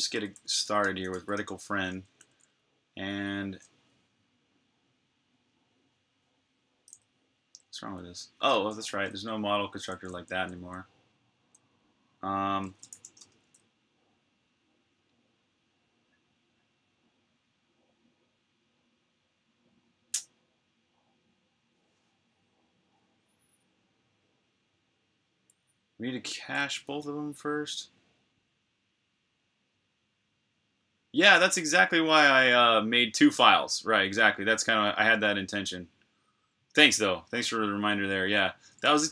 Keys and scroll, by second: 0.0-1.9 typing, 3.6-4.3 typing, 7.4-10.4 typing, 12.5-13.3 typing.